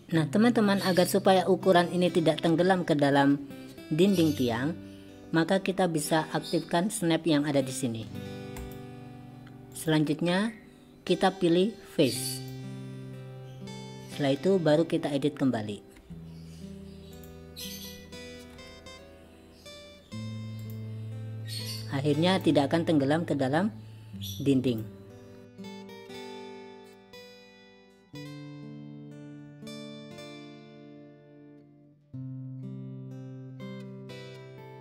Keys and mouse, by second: 8.6 click, 9.8-13.9 drag, 16.1 Tab, 17.2 click, 18.6 g, 21.9 click, 24.8 click, 25.6 click, 26.1 g, 28.2 g, 29.8 click, 31.0 g, 33.9 click.